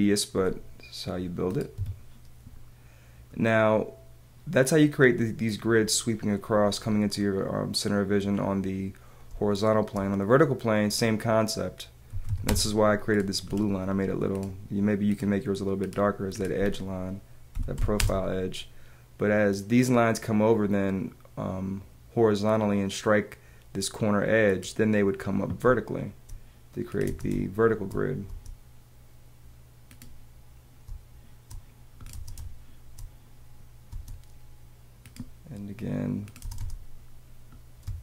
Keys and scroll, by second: 1.7 Escape, 9.2 space, 12.1 t, 13.3 space, 16.5 Escape, 25.6 space, 27.0 space, 30.8 space, 33.9 space, 36.4 space, 37.8 space.